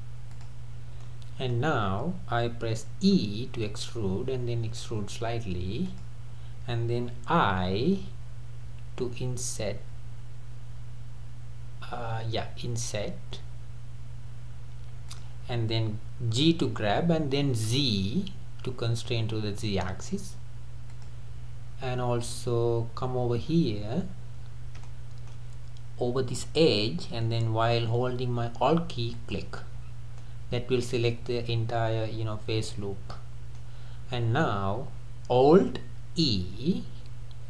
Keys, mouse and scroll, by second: 1.1-3.2 middle drag, 3.2 e, 7.8 middle click, 7.9 i, 11.8-13.8 middle drag, 16.4 g, 23.5-23.8 scroll up 3, 24.9-28.0 shift+middle drag, 29.2 alt+click, 29.8-30.2 scroll down 2, 30.2-33.4 middle drag, 34.2 scroll down 3, 36.4 alt+e.